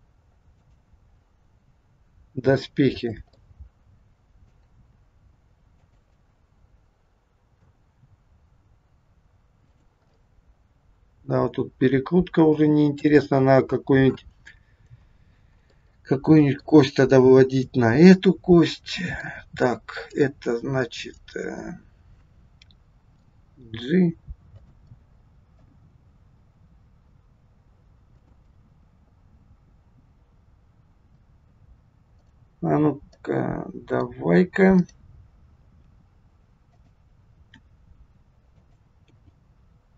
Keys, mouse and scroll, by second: 0.6 click, 1.5 r, 3.5 middle click, 4.7 r, 6.1 middle click, 8.1 r, 10.1 middle click, 15.7 middle click, 18.1 middle click, 20.1 click, 21.0 middle click, 23.7 g, 24.9 middle click, 25.7 g, 32.2 click, 33.1 middle click, 34.7 click, 35.6 g, 37.7 r, 39.1 g.